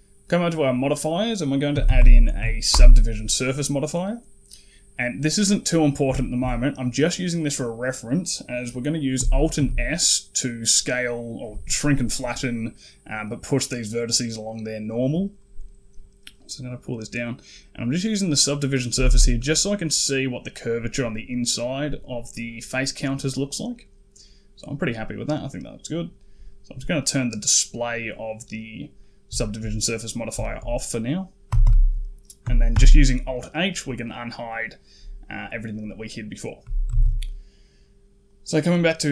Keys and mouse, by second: 0.4-2.7 drag, 6.0 shift+middle click, 9.4 alt+s, 18.8 typing, 19.2 middle click, 23.2 middle click, 26.9 click, 28.8 middle click, 29.2 shift+middle click, 29.9 middle click, 30.3 shift+click, 31.3 a, 31.5 a, 32.6 alt+h, 33.9 middle click, 35.3 middle click, 36.7 a, 36.9 a, 38.1 click.